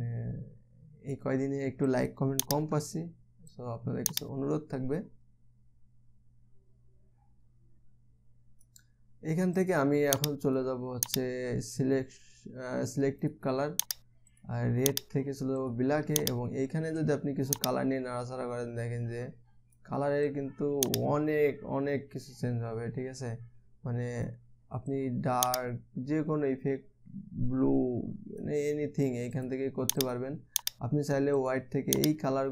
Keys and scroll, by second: 3.2 0.